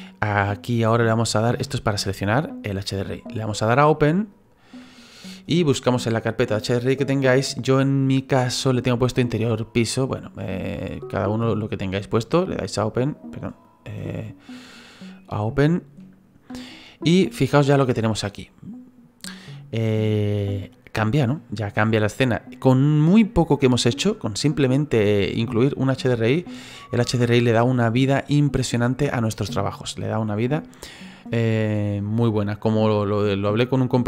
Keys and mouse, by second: 4.3 click, 6.5 click, 13.6 click, 14.6 click, 17.5 middle click, 21.0 middle click, 26.5 middle click.